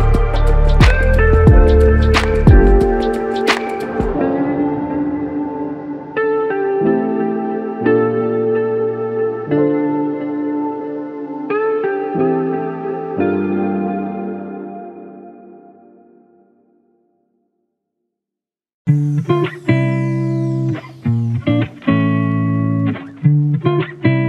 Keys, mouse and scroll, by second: 2.3 ctrl+click, 5.0 ctrl+alt+click, 8.9 ctrl+alt+click, 13.1 space, 15.1 space, 15.4 ctrl+click, 19.1 ctrl+alt+click, 23.3 alt+click.